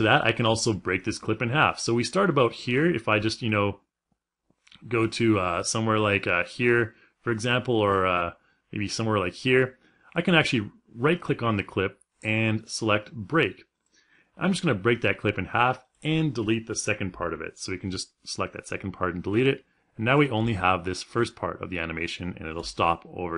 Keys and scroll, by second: 16.7 Delete, 20.5 space.